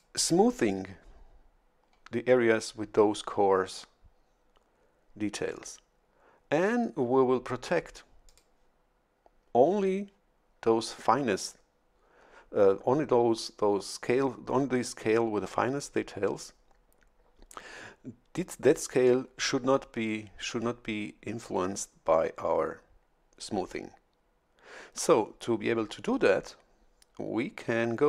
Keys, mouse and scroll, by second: 8.2 click.